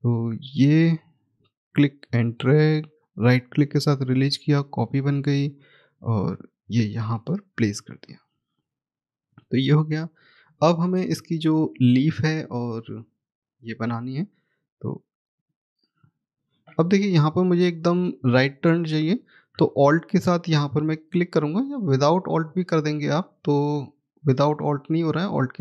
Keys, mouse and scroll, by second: 2.0 right click, 3.6 click, 8.7-9.4 scroll down 1, 10.7 middle click, 13.4 click, 18.7 scroll up 1, 19.9-20.3 scroll, 22.6 click.